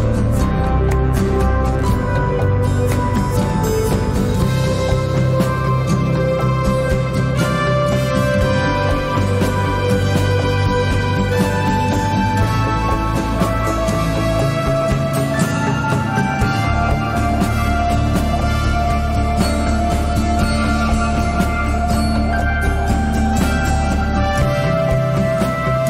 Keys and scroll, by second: 5.7 1, 7.8 1, 8.9 Tab, 9.9 1, 11.3 Tab, 15.1 s, 19.7 1, 20.0 ., 20.3 5, 21.0 Return, 25.3 s.